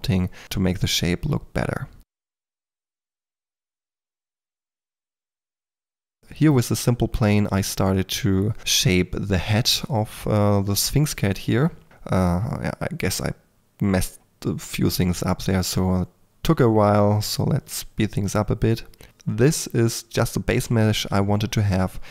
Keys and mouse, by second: 0.0-0.4 typing, 2.2-6.0 typing, 6.1 Tab, 7.0 shift+click, 7.2 Tab, 7.5 click, 7.8-13.4 typing, 8.6 click, 10.8 click, 11.5 click, 12.8 ctrl+g, 13.6 click, 14.8 x, 15.4 e, 15.4 f, 16.1 ctrl+f, 16.6-22.1 typing, 20.3 click, 21.1 click, 21.4 middle click.